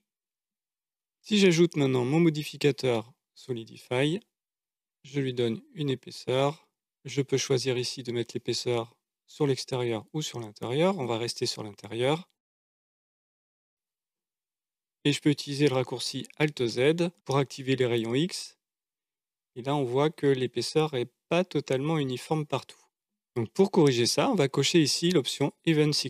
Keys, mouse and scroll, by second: 0.0 middle click, 1.6-4.0 drag, 4.9-6.6 drag, 7.7-10.8 drag, 12.4-15.9 middle drag, 16.6 alt+z, 26.0 click.